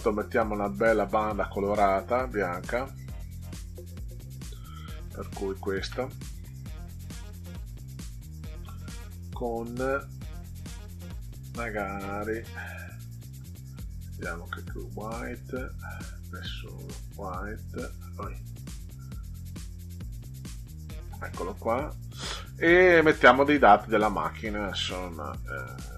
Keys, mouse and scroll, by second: 5.4 click, 7.9-9.9 drag, 12.8 click, 14.3 click, 16.1 click, 18.7 click, 20.5 click.